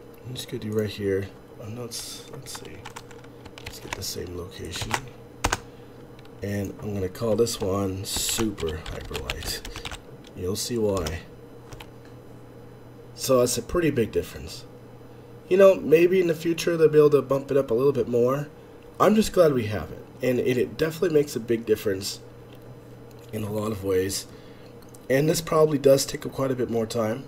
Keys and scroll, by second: 11.6 Escape, 11.6 space.